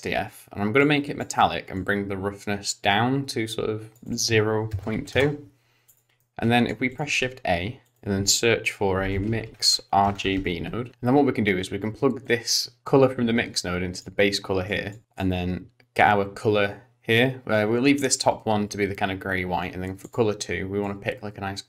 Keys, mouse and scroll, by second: 0.9 click, 1.8 click, 4.1 click, 5.9 click, 6.2 middle click, 6.9 click, 7.1 shift+a, 10.2 BackSpace, 10.4 BackSpace, 12.2 click, 14.6 click, 15.0 middle click, 15.0-16.6 scroll up 5, 20.0 click.